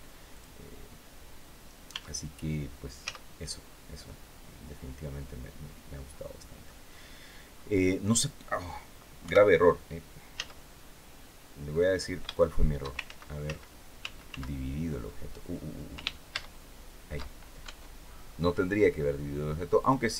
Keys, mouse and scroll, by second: 0.0 click, 1.1-1.5 scroll down 1, 1.6 Tab, 2.7 z, 3.2-3.5 scroll down 1, 3.7-6.5 middle drag, 8.9 KP_1, 10.0 z, 11.4-12.7 middle drag, 12.7 ctrl+shift+z, 16.0 ctrl+shift+z, 17.3 ctrl+Tab, 17.7-18.2 scroll up 1, 18.4 scroll down 1, 19.5 click.